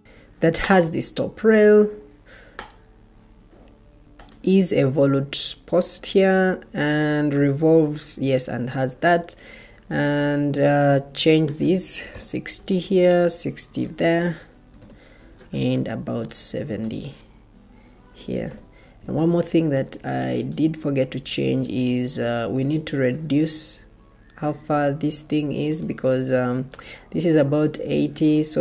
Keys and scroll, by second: 11.6-12.5 typing, 14.6 6, 18.0-18.8 typing.